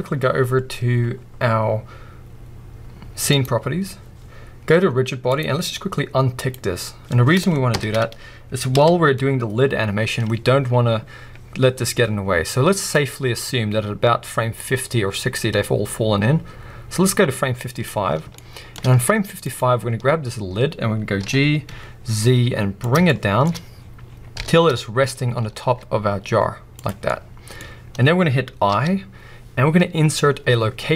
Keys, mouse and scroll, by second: 3.3 click, 5.3-6.5 drag, 7.7 shift+Left, 8.7 KP_1, 12.9-18.3 drag, 18.3-19.4 shift+middle drag, 19.0-19.4 scroll down 2, 19.4 click, 20.0-21.2 scroll up 1, 21.2 g, 23.0-26.8 shift+middle drag, 23.4-24.0 shift+scroll up 2, 24.4 g, 26.8 click, 27.1-30.9 middle drag.